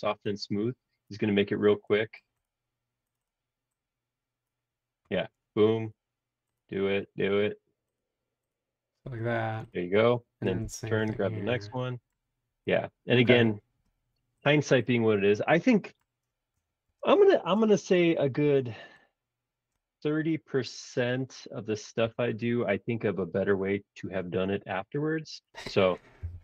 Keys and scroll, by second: 16.8 shift+g, 22.0 l.